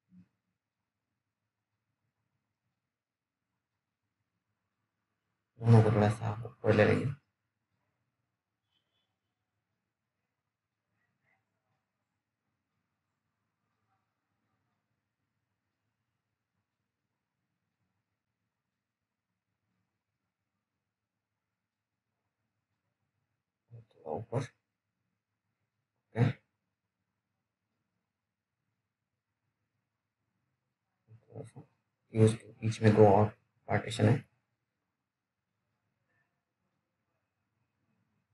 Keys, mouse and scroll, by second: 1.4 click, 2.1-2.6 scroll down 1, 2.6 click, 2.9-3.4 scroll down 1, 3.4 middle click, 3.7-4.3 scroll up 1, 4.3 click, 4.3 click, 7.6 scroll up 1, 12.2 click, 13.5 z, 14.3 click, 15.2-16.0 scroll up 1, 16.0 click, 16.0 click, 16.7-17.4 scroll down 1, 17.4 click, 18.7 middle click, 19.2 scroll down 1, 20.2 click, 33.2 ctrl+click, 35.8-36.4 scroll down 1.